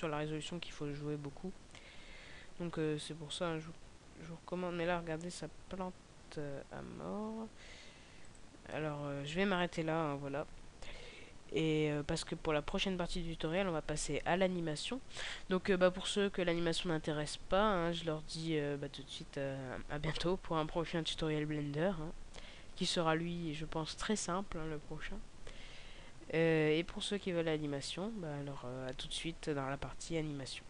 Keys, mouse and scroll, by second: 3.3 g, 8.8 click.